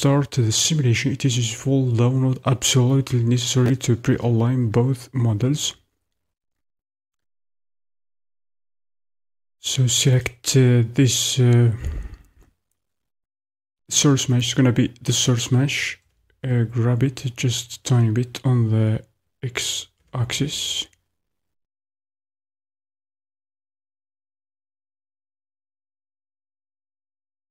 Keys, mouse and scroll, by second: 8.3 KP_1, 10.2 click, 17.3 g.